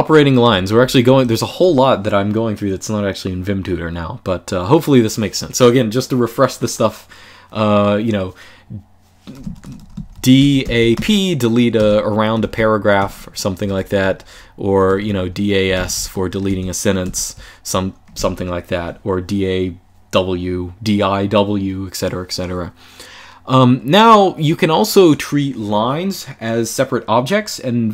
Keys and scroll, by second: 0.0-1.4 typing, 8.9-17.6 typing, 12.3 Escape.